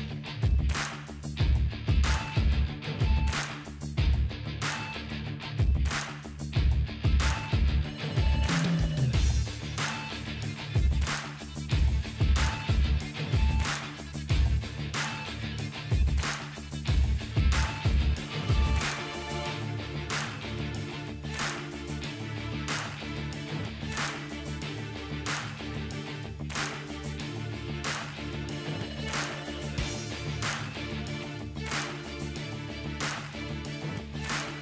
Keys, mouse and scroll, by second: 1.0-2.4 alt+drag, 4.1-5.0 typing, 4.4 click, 7.2 typing, 7.6-10.5 drag, 11.6-12.4 scroll down 3, 13.5 scroll up 1, 19.0-19.3 scroll up 1, 19.0 typing, 19.3-20.1 drag, 22.9 typing, 24.3-30.0 drag, 24.7-26.1 typing, 28.3 typing, 30.3 click, 32.1-33.0 click, 34.2-34.6 click.